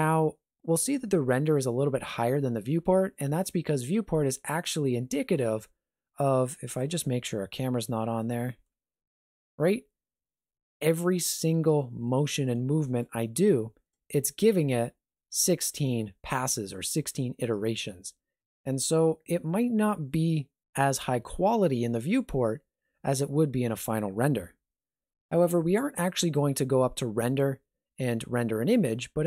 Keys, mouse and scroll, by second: 6.8 n, 7.8 n, 8.4 middle click, 12.1 middle click, 12.7 shift+middle click, 13.2 scroll up 1, 13.5 middle click, 14.1 middle click, 17.5 middle click, 24.5 KP_0, 27.3 click.